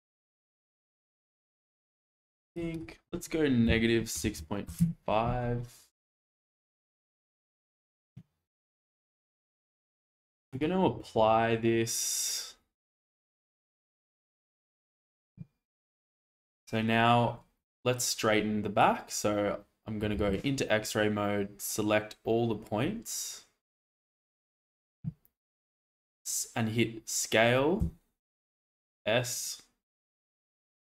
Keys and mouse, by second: 2.7-4.8 drag, 6.0-6.4 shift+middle drag, 10.5 click, 14.6 shift+middle click, 15.9 Tab, 18.0 click, 20.2 alt+z, 21.1 click, 24.1 shift+middle click, 27.8 s.